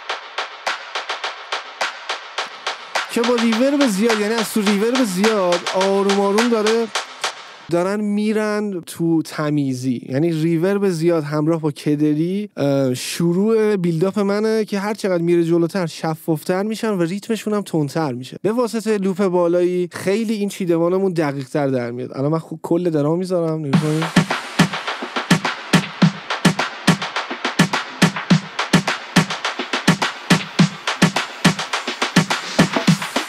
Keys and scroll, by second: 7.5 space, 23.9 space.